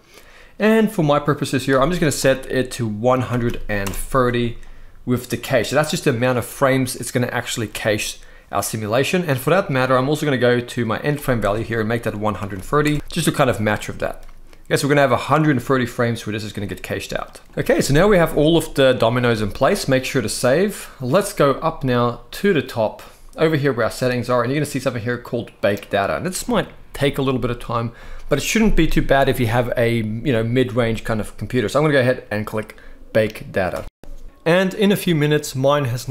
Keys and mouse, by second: 1.4-3.6 drag, 7.1 click, 10.8-12.6 drag, 13.2 middle click, 17.1 middle click, 18.9 ctrl+s, 35.5-35.9 middle drag.